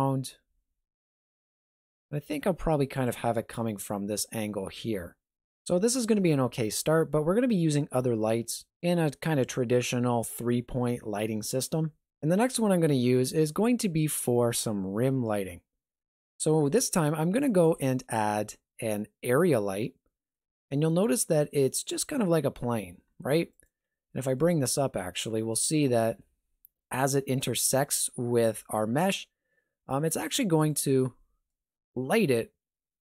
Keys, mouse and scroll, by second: 17.6 shift+a, 20.7 middle click, 21.5-23.8 scroll up 2, 21.9 g, 23.8 scroll up 2, 24.1 shift+middle click, 24.5 scroll up 1, 25.0 shift+middle click, 25.3 scroll up 1, 25.4 middle click, 25.8 middle click, 26.1 g, 31.1 middle click.